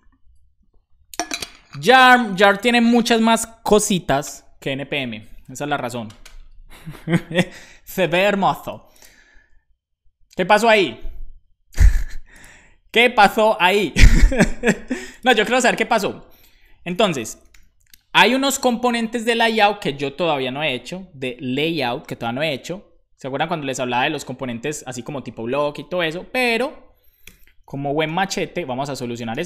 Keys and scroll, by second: 16.5 Left, 16.9-18.0 typing, 27.3 =, 28.9 Left.